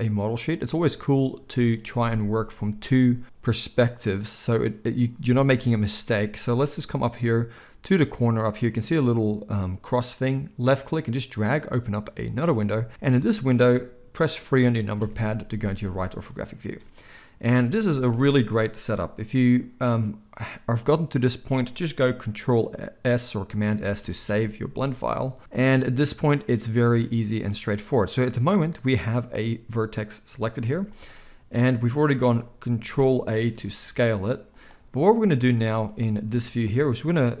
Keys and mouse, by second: 0.5-10.6 middle drag, 10.6-34.6 drag, 14.9 KP_3, 23.9 ctrl+s, 24.1 ctrl+s, 28.0 z, 33.3 ctrl+a, 34.6-37.4 middle drag.